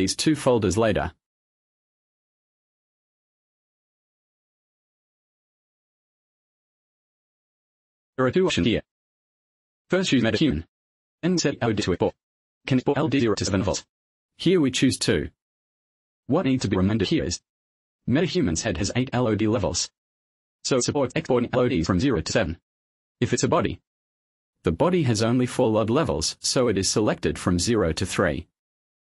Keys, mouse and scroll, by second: 0.8 click, 1.3 ctrl+c, 4.0 click, 4.5 ctrl+v, 4.9 Return, 6.2 click, 7.2 click, 8.1 click, 9.2 click, 9.8 click, 11.8 click, 14.7 click, 21.3 click, 23.2 click, 24.2 click, 25.2 click, 25.9-26.3 scroll down 1, 27.0 click, 27.6-28.0 scroll down 1, 28.2-29.0 scroll down 5.